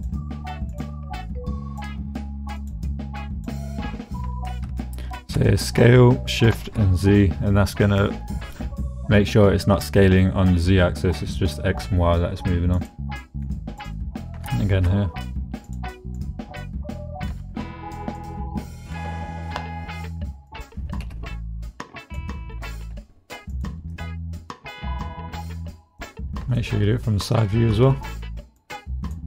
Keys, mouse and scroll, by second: 0.1 g, 0.7 click, 1.3 click, 1.9 g, 2.6 click, 3.3 click, 4.2 s, 6.5 shift+z, 12.7 middle click, 13.6 middle click, 14.5 shift+s, 14.7 shift+z, 15.7 middle click, 16.3 middle click, 17.3 s, 18.0 middle click, 18.7 click, 20.5 click, 21.0 g, 22.1 click, 22.7 click, 22.9 g, 23.5 click, 23.9 click, 24.8 click, 26.0 middle click, 26.6 shift+middle click, 27.5 shift+middle click, 28.6 click.